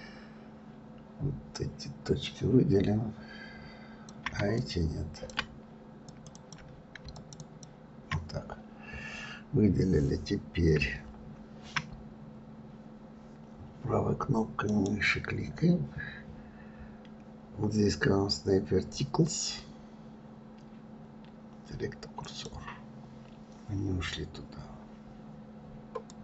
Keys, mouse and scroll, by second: 4.5-7.6 drag, 8.9-11.9 scroll down 1, 14.6-26.2 right drag.